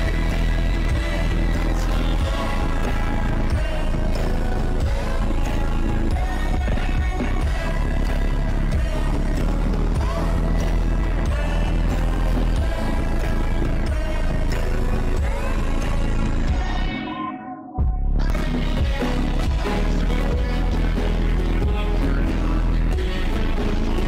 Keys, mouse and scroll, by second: 0.3 shift+`, 1.0 click, 1.2 click, 1.5 click, 3.3 shift+`, 4.3 click, 4.8 click, 5.0 click, 5.5 click, 6.2 ctrl+z, 6.3 click, 7.0 click, 8.2 shift+`, 11.4 click, 13.9 click, 15.6 shift+`, 17.6 shift+`, 18.6-19.0 drag, 19.5-20.6 drag, 21.4-22.7 drag, 23.1 click, 23.4 shift+`.